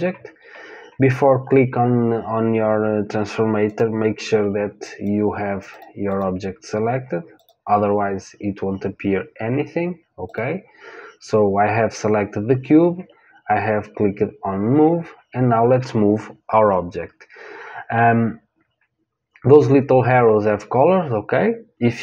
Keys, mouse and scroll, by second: 3.6-9.3 drag, 10.2 click.